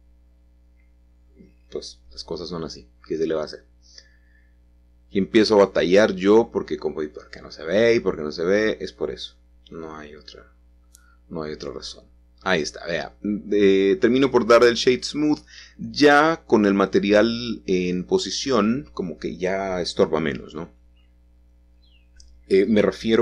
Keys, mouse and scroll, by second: 2.1 click, 2.7 click, 4.2 ctrl+i, 5.4 h, 6.7-7.8 drag, 7.8 middle click, 8.7 click, 9.5-11.5 middle drag, 11.5 right click, 12.4 middle click, 12.6-14.7 drag, 15.5-16.8 middle drag, 15.9-16.8 scroll up 1, 16.8-17.4 scroll down 1, 22.2 click.